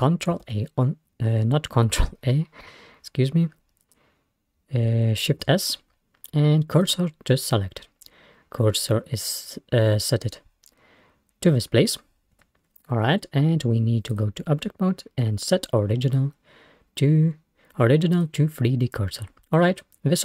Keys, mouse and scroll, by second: 0.5 ctrl+a, 5.3 shift+s, 12.4 Tab, 14.2-16.9 drag, 19.2-20.2 scroll down 1.